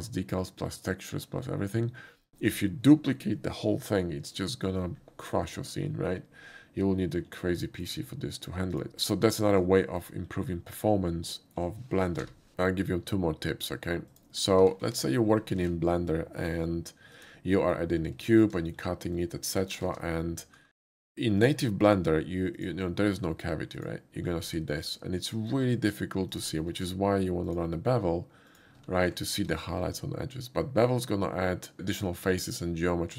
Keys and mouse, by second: 7.7 shift+middle click, 8.8 shift+click, 9.4 shift+middle click, 9.9 shift+middle click, 11.4 shift+middle click, 12.2 n, 14.2 click, 15.0 click, 15.0 x, 16.2 shift+a, 17.2 click, 17.7 middle click, 18.4 shift+middle click, 18.7 middle click, 19.2-19.7 drag, 19.9 ctrl+z, 20.5 alt+w, 20.5-21.0 drag, 21.4 click, 22.6 click, 23.8 click, 24.7 shift+middle drag, 25.5-25.9 shift+drag, 26.4 shift+click, 26.8 q, 27.5 click, 28.5 click, 29.3 alt+q, 29.3 click.